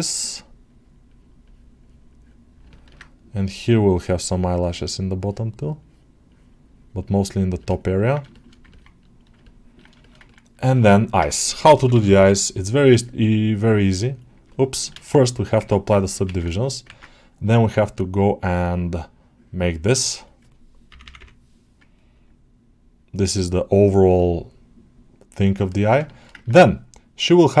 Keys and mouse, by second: 0.0 click, 0.0 ], 0.5 click, 0.9 click, 1.3-2.4 drag, 2.6 ctrl+middle click, 3.9 click, 4.2-7.4 drag, 7.8 ctrl+alt+middle click, 8.2 alt+shift+middle click, 8.6 ctrl+middle click, 8.9 middle click, 9.3 ctrl+alt+middle click, 9.9 shift+middle click, 10.1 ctrl+middle click, 13.1-14.7 drag, 14.9 ctrl+z, 15.5 ctrl+Tab, 16.8 ctrl+Tab, 17.9-25.4 drag, 25.6 ctrl+alt+middle click, 25.9 shift+middle click, 26.2-27.6 ctrl+middle drag.